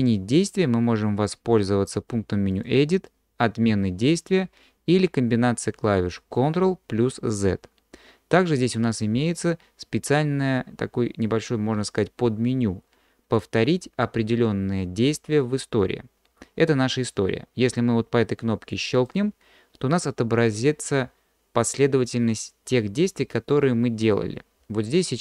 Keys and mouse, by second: 2.5-25.2 drag.